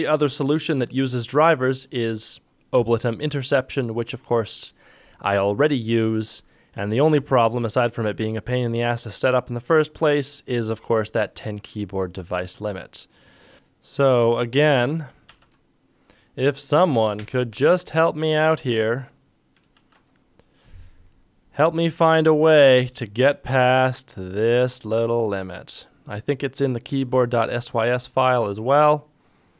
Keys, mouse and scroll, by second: 13.5 ctrl+click, 15.0 ctrl+click, 15.3 ctrl+Tab, 17.2 ctrl+Tab, 19.8 ctrl+shift+Tab.